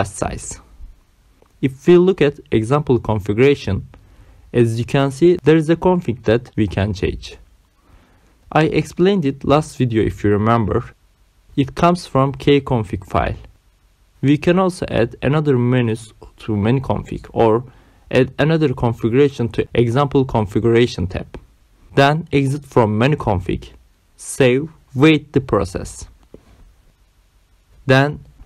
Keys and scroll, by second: 1.8 Right, 3.8 Return, 4.2 Down, 4.8 Return, 10.7 Return, 22.1 Right, 22.5 Return, 23.9 Right, 25.2 Return.